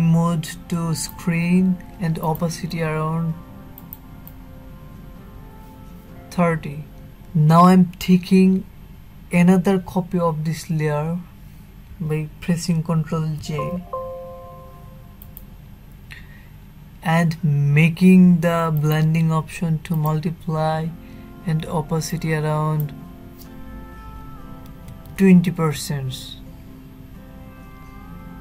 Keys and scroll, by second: 11.6 ctrl+j.